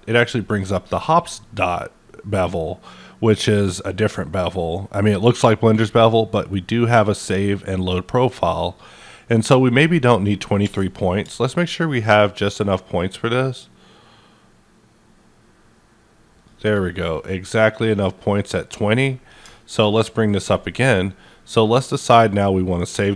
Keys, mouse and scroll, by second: 11.2 click, 11.6-19.3 shift+drag, 19.4-23.1 shift+drag, 20.6 ctrl+right click.